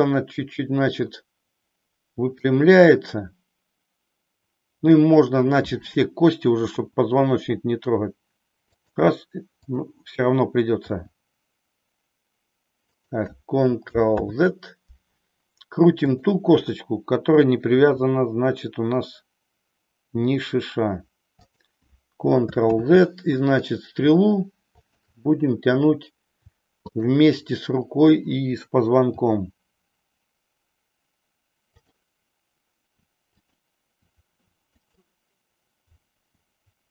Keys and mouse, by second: 6.8 r, 8.9 click, 9.5-10.8 drag, 11.0 r, 14.1 ctrl+z, 16.0-17.1 drag, 17.8 r, 22.6 ctrl+z, 24.8-25.9 drag, 26.9 shift+click, 29.1 r, 33.0-33.9 r, 34.5-36.2 r, 34.8 click.